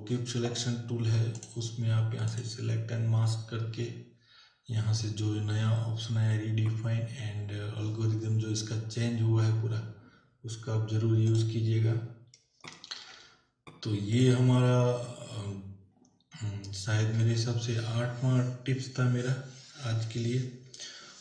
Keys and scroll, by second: 12.9 ctrl+w.